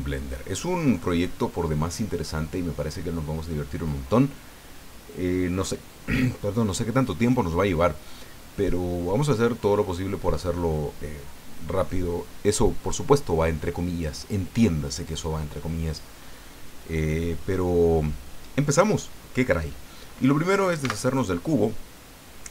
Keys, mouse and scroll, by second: 20.8 x, 21.1 click.